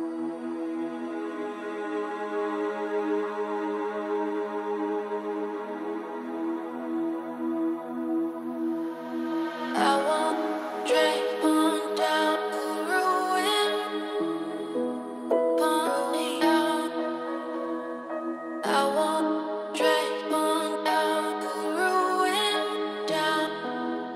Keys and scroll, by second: 11.5 ctrl+c.